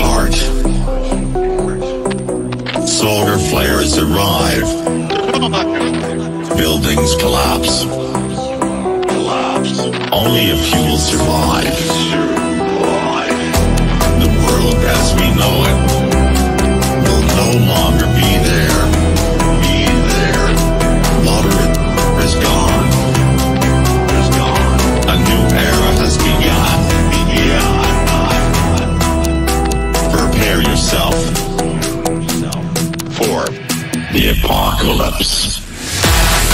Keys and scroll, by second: 16.1 shift+F2, 17.4 F9.